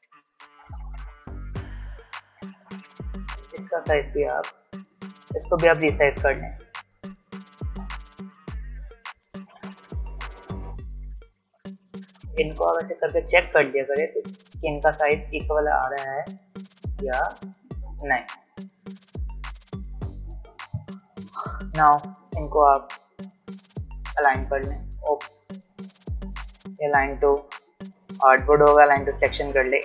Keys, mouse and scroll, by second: 0.8 alt+scroll up 1, 1.6 alt+shift+click, 3.1-3.4 alt+scroll down 1, 5.7 alt+shift+click, 7.5 alt+scroll up 1, 9.2-19.2 alt+shift+drag, 25.4 z, 26.8 click.